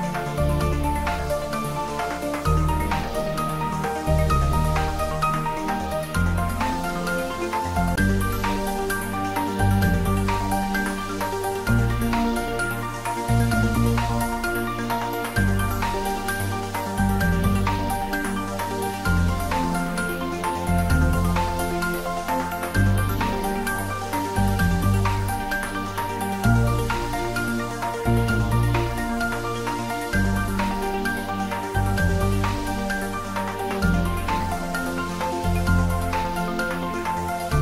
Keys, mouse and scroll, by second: 1.0 click, 2.1 shift+z, 5.1 shift+right click, 6.7 shift+a, 9.1 click, 10.4 s, 12.8 click, 13.1 s, 13.4 z, 14.5 click, 16.1-17.6 typing, 17.6 click, 19.1-20.0 typing, 21.2 click, 23.7 s, 25.0 click, 28.5 g, 32.0 click, 33.3 scroll up 1, 34.5 click, 36.2 g, 36.8 x.